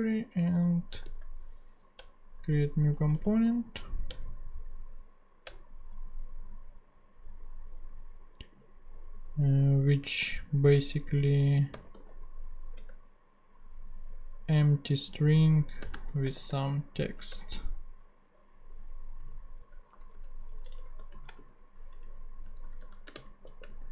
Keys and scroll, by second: 0.8-1.6 typing, 2.0 Return, 3.2 super+v, 4.1 super+Return, 5.4 Return, 10.7-12.4 typing, 12.7 Return, 15.8 ,, 15.9 space, 16.3 shift+t, 17.3 shift+Return, 19.6 BackSpace, 19.9 Right, 20.6 Return, 21.1 shift+,, 21.4 shift+/, 22.0 Up, 22.5 Tab, 22.9-23.9 typing.